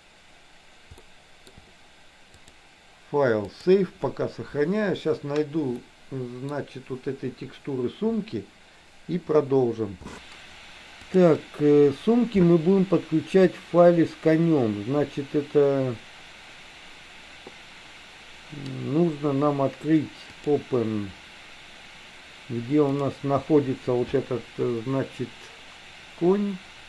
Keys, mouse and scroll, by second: 1.1 shift+middle click, 2.4-3.9 drag, 5.9 middle click, 11.2-20.9 drag.